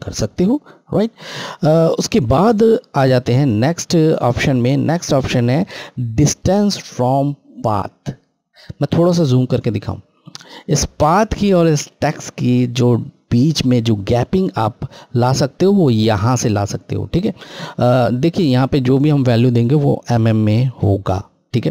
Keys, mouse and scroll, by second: 3.0 click, 8.6 scroll.